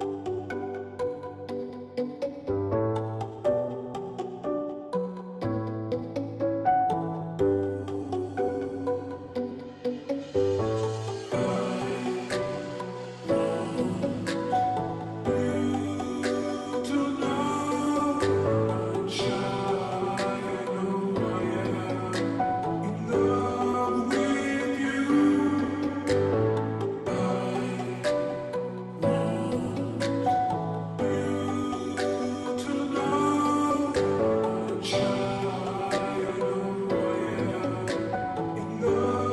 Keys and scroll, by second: 17.0 ctrl+t, 19.7 Return.